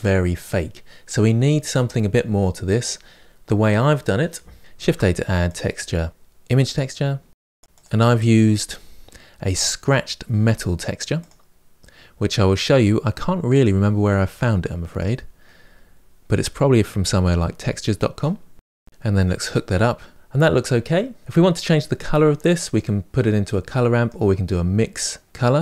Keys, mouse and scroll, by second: 4.6 Delete, 14.8 click, 20.1-20.7 scroll down 5, 20.7-22.6 middle drag, 22.6 click.